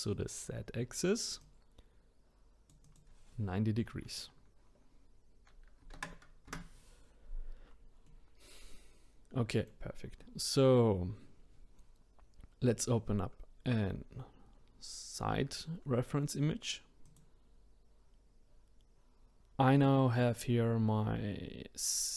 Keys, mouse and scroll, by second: 1.4-6.0 drag, 8.1-17.0 middle drag, 17.0-19.4 drag.